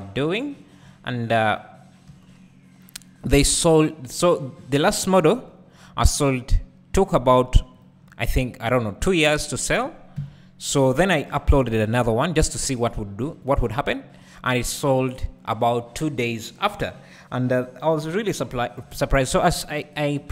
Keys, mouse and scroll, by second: 1.1-1.9 scroll up 1, 2.1 3, 3.3-4.9 drag, 4.9 2, 5.3 3, 6.4 ctrl+click, 7.1-8.2 ctrl+drag, 8.2-9.0 scroll down 2, 9.0-10.2 shift+drag, 10.2 KP_1, 11.6 e, 12.3-13.6 scroll down 2, 13.6-20.3 drag, 16.0-17.3 scroll down 2, 17.3 scroll down 1, 17.5 scroll up 1, 18.8 Tab.